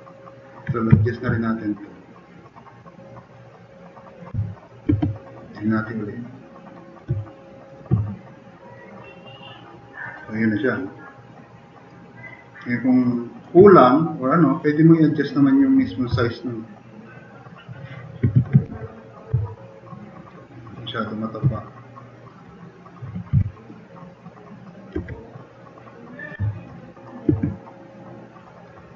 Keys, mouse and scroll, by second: 0.0 right click, 1.0 click, 2.2 click, 2.4 click, 3.5 click, 4.4 click, 4.9 alt+q, 5.7-6.3 middle drag, 9.2 click, 9.7-10.3 drag, 10.5-11.2 drag, 11.7 click, 12.0 click, 12.7-13.3 drag, 16.1-16.5 middle drag, 18.3 alt+q, 18.7 s, 19.6 click, 19.9 drag, 20.7 drag, 23.4 t, 23.8-24.7 drag, 25.0 e, 25.6 click, 26.4 drag, 26.7-27.0 drag, 27.4 alt+q.